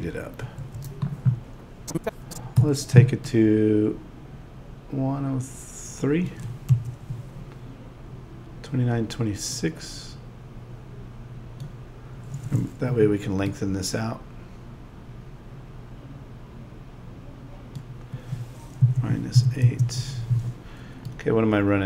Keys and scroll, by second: 2.6 a, 6.7 Home, 12.9 a, 18.8 -.